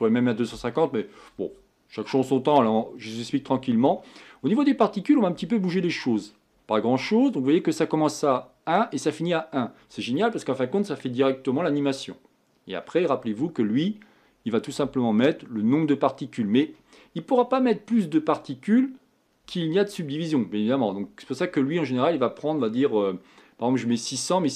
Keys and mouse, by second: 4.8-24.5 middle drag.